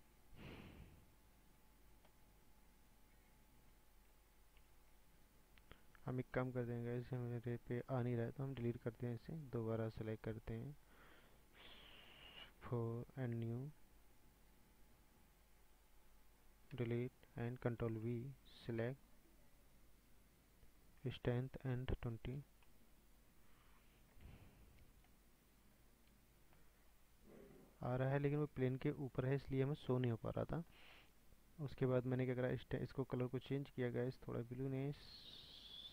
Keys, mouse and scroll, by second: 4.8 ctrl+z, 8.2 click, 9.1-9.4 drag, 9.5 drag, 10.1 click, 11.8 click, 13.9 click, 15.9 drag, 16.7 Delete, 17.8 ctrl+v, 19.9 click, 20.4-24.4 drag, 24.4 scroll down 2, 24.7-25.8 drag, 25.1-25.8 middle drag, 25.8 scroll down 6, 26.5-27.1 shift+middle drag, 27.1-27.7 scroll up 5, 27.7 scroll down 4, 27.9-29.0 middle drag, 29.0-29.5 scroll up 6, 29.5-34.3 middle drag, 31.5-34.3 drag.